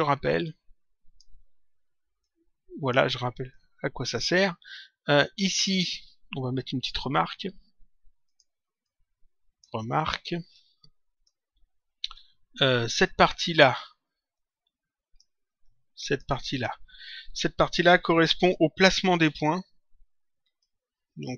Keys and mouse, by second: 0.3 click, 2.1 click, 3.5 click, 5.0 click, 8.3 click, 10.5 click, 12.1 click, 14.3 click, 15.5 click, 20.4 click.